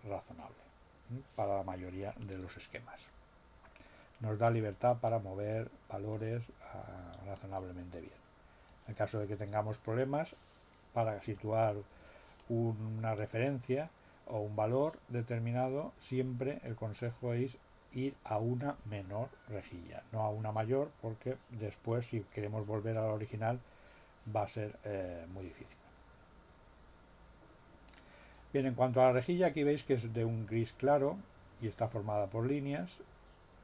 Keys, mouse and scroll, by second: 4.9-6.3 drag, 7.3-8.9 drag, 12.3-13.5 drag, 16.9 click, 27.9 click.